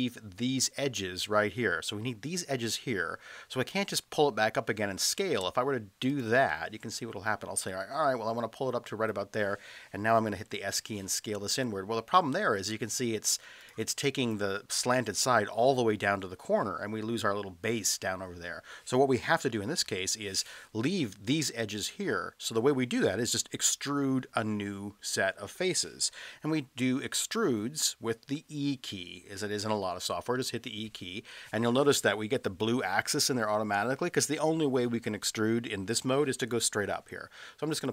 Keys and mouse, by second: 5.5 space, 7.8-9.0 drag, 10.6 s, 13.6 click, 19.4 ctrl+z, 19.9 ctrl+z, 30.4 e.